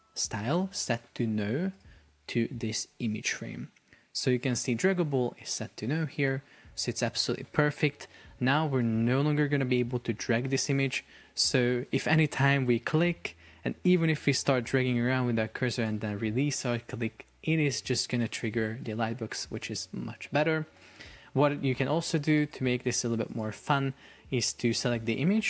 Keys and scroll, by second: 8.0 super+p, 21.6 Escape.